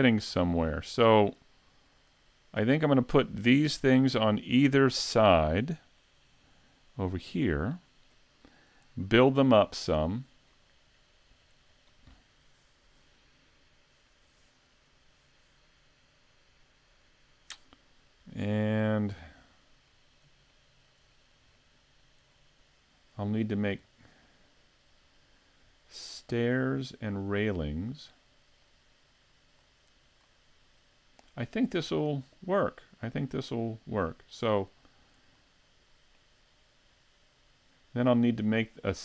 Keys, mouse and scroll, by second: 4.6-5.3 scroll down 6, 6.0 middle click, 19.1 middle click, 19.9 shift+middle click, 20.5 middle click, 21.1 shift+middle click, 21.6 middle click, 22.3 shift+middle click, 23.5 scroll up 1, 23.9 middle click, 28.6 middle click, 29.6-30.3 scroll down 1, 30.3 middle click, 30.3-30.8 scroll down 1, 32.6 click, 34.5 click, 35.4 middle click, 38.3 middle click.